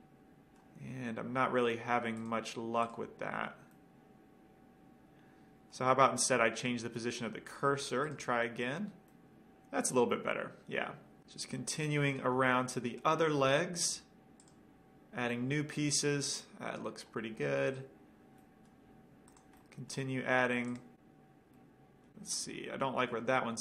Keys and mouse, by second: 0.1-0.5 middle drag, 4.0 middle drag, 6.8-8.7 drag, 9.3-11.2 middle drag, 12.3-14.1 middle drag, 15.5-17.0 middle drag, 17.9 click, 18.6-21.3 middle drag, 20.9-21.8 drag, 20.9 right click, 21.8-22.1 middle drag.